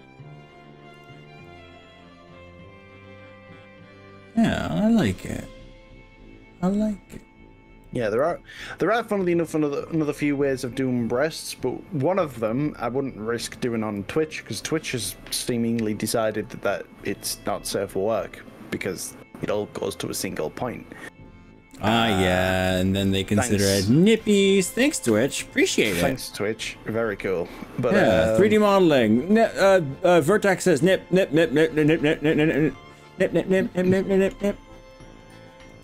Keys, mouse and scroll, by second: 1.0 click, 1.5-3.1 middle drag, 3.3-4.3 middle drag, 4.7 scroll down 3, 5.3-7.1 middle drag, 7.9 click, 10.0 middle click, 11.4 g, 13.1 scroll up 2, 13.5-14.0 scroll down 4, 14.0 r, 14.5 scroll up 1, 14.7-15.3 scroll down 3, 16.5 scroll down 1, 16.7 scroll up 2, 17.3-17.9 scroll up 3, 17.9-18.7 scroll down 4, 19.3 scroll up 1, 19.7 scroll down 1, 24.1 click, 24.9 click, 26.1 scroll up 1, 26.7 scroll up 3, 27.3-29.5 middle drag, 29.5 scroll down 3, 30.1-34.5 middle drag, 34.9 middle click.